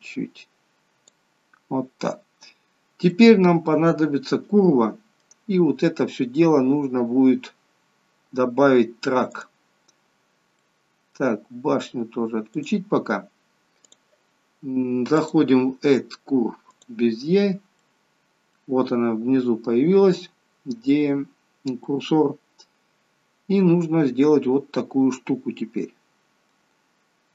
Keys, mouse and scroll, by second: 2.0 scroll up 4, 2.7 scroll down 2, 3.0 middle click, 6.8-7.3 scroll down 4, 7.9-9.3 scroll down 5, 9.3 click, 10.2-10.6 scroll down 1, 10.6 middle click, 12.6 click, 13.9 click, 15.2 click, 17.8 middle click, 20.2 middle click, 21.8 middle click.